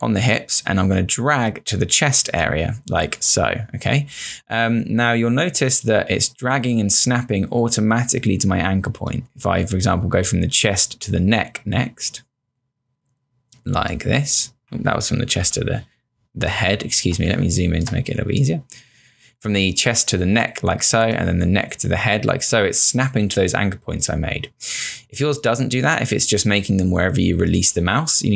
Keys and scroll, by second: 15.4 z, 17.4 space.